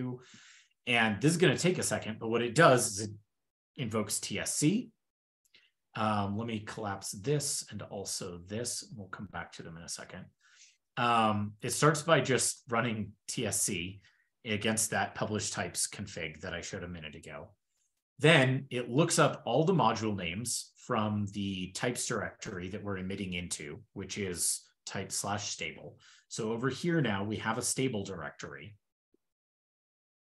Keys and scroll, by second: 6.7 alt+super+[, 8.0 alt+super+[.